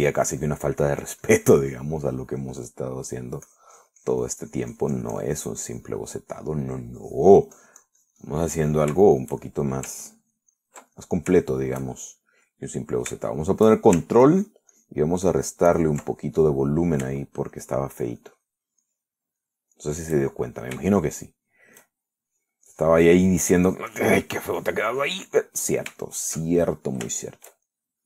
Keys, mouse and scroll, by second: 0.9-3.7 shift+drag, 3.2 shift+middle click, 3.9 click, 3.9 middle click, 4.7-7.3 drag, 7.3 middle click, 8.2-9.7 drag, 9.8 middle click, 10.3 shift+middle click, 11.3 ctrl+shift+click, 12.2 ctrl+middle click, 12.7 ctrl+shift+middle click, 13.4 shift+middle click, 14.0 middle click, 14.5 shift+middle click, 15.5 ctrl+click, 16.0 ctrl+click, 16.5 ctrl+click, 16.9 ctrl+click, 17.4 ctrl+middle click, 18.4 shift+middle click, 19.5 shift+middle click, 20.1 shift+middle click, 20.7 shift+middle click, 21.4 shift+middle click, 22.6 shift+middle click, 23.0 shift+middle click, 23.9-26.6 drag, 26.6 middle click, 27.3-28.0 shift+middle drag.